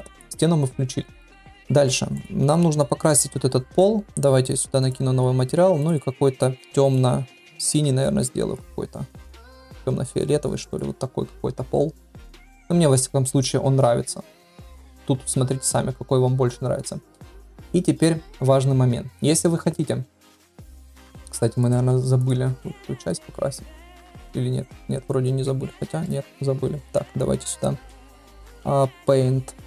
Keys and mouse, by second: 1.6 middle drag, 4.8 click, 21.7-26.0 drag, 26.0-26.5 middle drag, 27.4-29.6 drag.